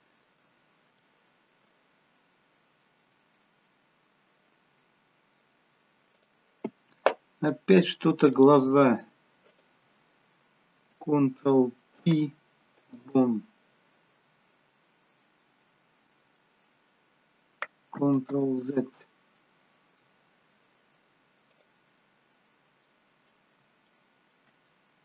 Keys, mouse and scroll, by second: 0.5-1.0 scroll up 1, 1.0 shift+middle click, 1.0-1.7 scroll up 1, 1.7 middle click, 4.6 scroll down 1, 6.1 click, 7.5 middle click, 8.4 click, 9.5 shift+click, 11.9 ctrl+p, 14.7 middle click, 16.6-17.0 scroll down 3, 19.5 ctrl+z, 21.8 click, 22.4-22.8 scroll up 1, 22.8 middle click, 23.9 shift+middle click, 24.5-25.0 scroll up 1.